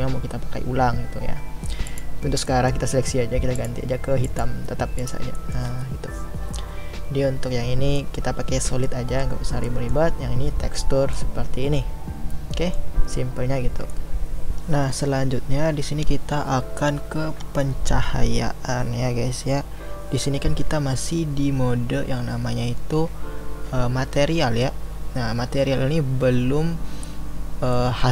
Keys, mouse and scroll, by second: 1.9 click, 2.5-4.4 middle drag, 4.4 click, 5.4-28.1 middle drag.